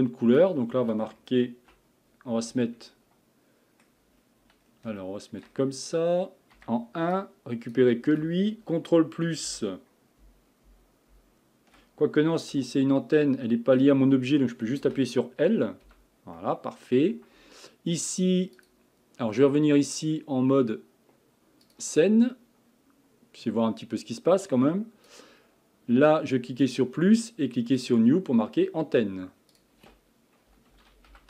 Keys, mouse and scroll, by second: 2.9-4.1 middle drag, 4.1-4.7 scroll up 2, 4.7-5.0 scroll down 2, 5.0-6.6 shift+middle drag, 6.6 1, 7.1 click, 9.5 KP_Add, 10.2 KP_Add, 11.1 KP_Add, 12.5 1, 13.2-14.8 middle drag, 14.8 a, 15.8 l, 16.4-18.7 middle drag, 18.7 click, 19.9-22.9 drag, 24.4-31.2 drag.